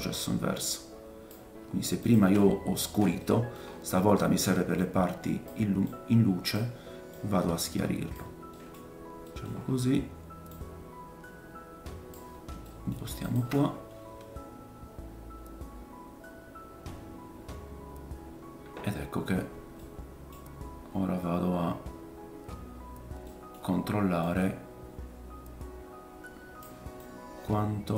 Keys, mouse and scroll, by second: 3.2 middle click, 3.6-4.5 scroll up 4, 4.8-13.4 middle drag, 4.8-9.5 right drag, 8.7-9.2 scroll down 4, 9.5 scroll up 1, 10.5 click, 13.4-15.2 ctrl+shift+drag, 19.8 middle click, 20.6-22.9 scroll up 7, 23.2 middle click, 23.3-27.9 drag.